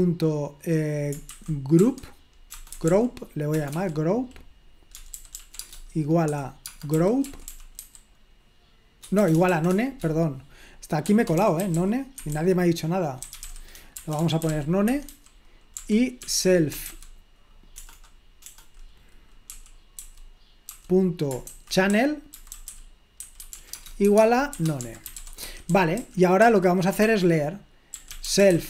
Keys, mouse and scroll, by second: 0.0-0.2 typing, 2.5-3.7 typing, 4.8-9.5 typing, 10.8-19.6 typing, 21.9-26.4 typing, 27.8-28.6 typing.